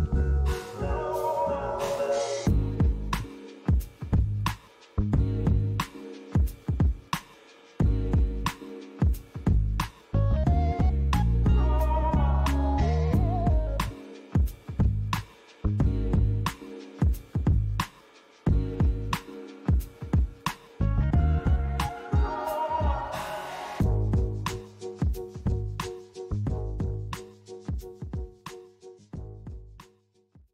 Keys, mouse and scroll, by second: 4.5 click, 8.0 click, 15.1 click.